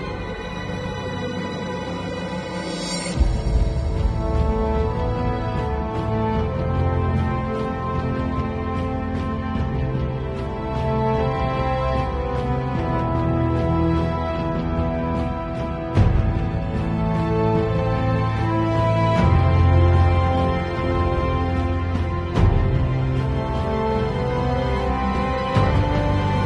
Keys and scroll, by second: 8.1 Return, 15.6 b, 16.6 [, 18.0-20.6 typing, 22.8 x, 23.5 x, 24.7 ], 25.4 x, 26.2 space.